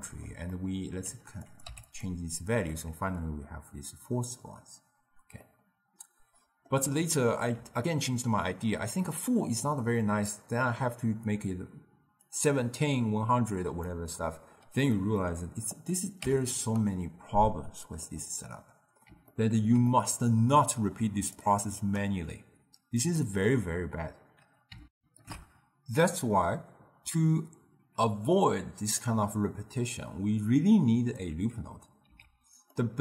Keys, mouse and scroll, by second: 0.1-1.6 middle drag, 1.6 click, 2.9-12.2 middle drag, 12.4-15.1 drag, 15.1 ctrl+middle click, 15.9-18.2 drag, 18.2-21.5 middle drag, 21.5-23.3 drag, 25.0 ctrl+alt+shift+q, 28.1-31.3 drag, 32.1 x, 32.8-33.0 middle drag.